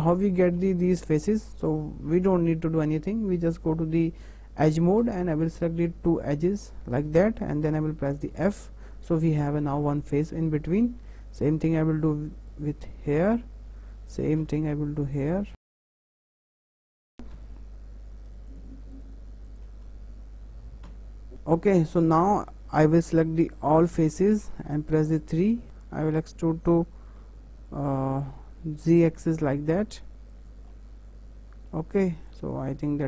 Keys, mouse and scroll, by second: 0.3-0.7 scroll up 1, 0.7-3.9 shift+middle drag, 4.6 2, 5.3 click, 6.0 shift+click, 7.3-8.3 shift+middle drag, 8.3 f, 10.0 click, 10.7 shift+click, 11.7 f, 12.5 click, 13.2 shift+click, 14.4 f, 15.1 click, 15.6 shift+click, 15.7 f, 15.9 click, 16.0 shift+click, 16.3 f, 16.3 shift+middle click, 16.4 scroll up 3, 16.5 shift+middle click, 16.7 shift+middle click, 16.8 click, 16.9 shift+click, 17.3 f, 18.5 click, 18.9 shift+click, 19.4 shift+click, 20.8 f, 21.3 shift+middle click, 21.4 scroll down 2, 21.6-23.8 middle drag, 23.8 a, 24.9 3, 25.4 middle click, 30.7-32.3 middle drag, 32.3 click.